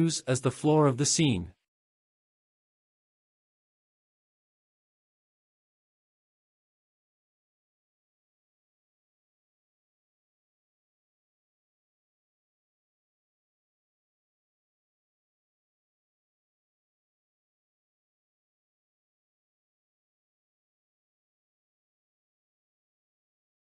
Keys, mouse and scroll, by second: 3.3-4.2 drag, 4.8 click, 7.7-8.5 shift+middle drag, 11.9 click, 12.8-14.0 scroll up 2, 14.5 shift+click, 16.3 scroll down 1, 19.3-19.7 drag, 20.3 click, 20.5-20.9 scroll down 4, 21.6-22.4 scroll down 3, 22.4-22.8 scroll up 1.